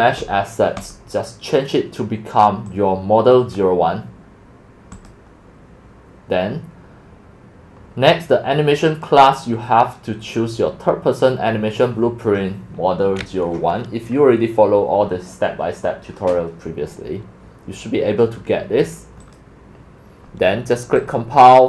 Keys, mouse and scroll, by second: 0.8 click, 0.9 scroll, 1.4 right click, 2.6-5.1 drag, 8.9 click, 19.2 click, 19.4-21.1 drag, 19.8-20.4 scroll up 2.